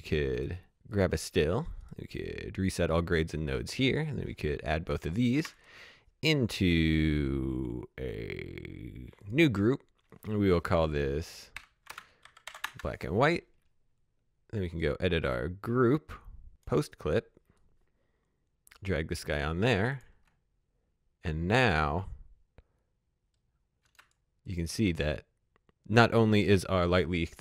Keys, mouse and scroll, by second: 0.9 click, 1.8 right click, 2.6 click, 5.3 shift+click, 5.5 right click, 9.2 click, 10.9 shift+Num_Lock, 11.5-12.4 typing, 12.6 Return, 14.6 click, 21.5 space, 23.8 space, 24.0 click.